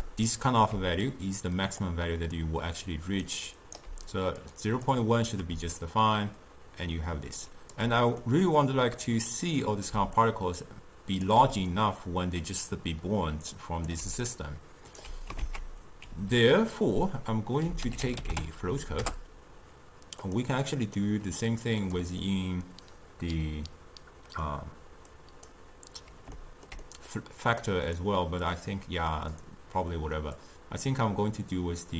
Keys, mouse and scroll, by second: 0.8 d, 1.1 click, 1.9-3.3 d, 3.9 d, 4.5-8.3 drag, 8.3-10.0 middle drag, 10.0 d, 10.3-11.3 drag, 11.3 d, 11.9 d, 13.6 click, 14.1 d, 14.3 right click, 15.1 d, 15.5 ctrl+a, 20.6-21.5 middle drag, 21.5 click, 22.3-25.2 middle drag, 25.2-26.4 drag, 26.4-27.7 ctrl+middle drag, 27.7 click, 28.5 click, 30.4-31.9 drag.